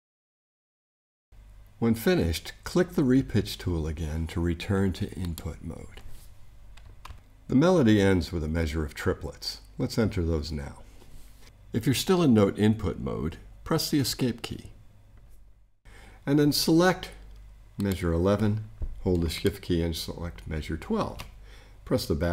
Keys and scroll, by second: 14.0 ⟲.